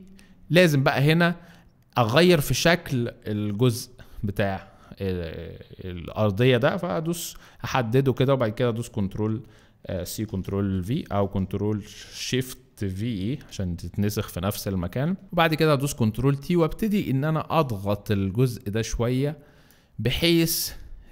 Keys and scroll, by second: 10.0 ctrl+c, 10.3 ctrl+v, 11.2 ctrl+z, 13.3 ctrl+shift+v, 15.4 ctrl+alt+t.